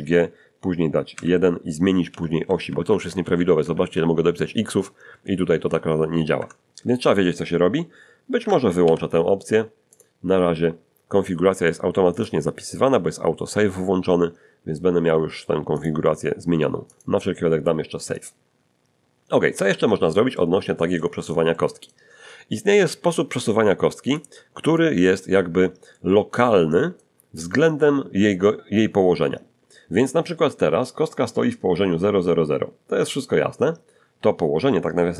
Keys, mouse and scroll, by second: 1.1 2, 2.4 x, 2.6 x, 6.4 Escape, 8.8 ctrl+alt+u, 9.9 click, 12.1 click, 15.8 click, 16.9 click, 18.2 click, 19.5 alt+g, 20.3-21.4 alt+middle drag, 24.2 click, 25.9-27.2 middle drag.